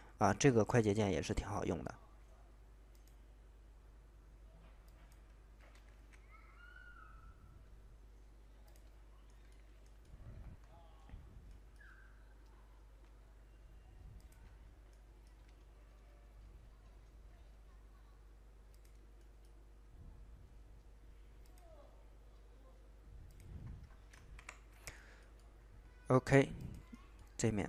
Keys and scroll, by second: 5.9 ctrl+z, 24.3 Escape.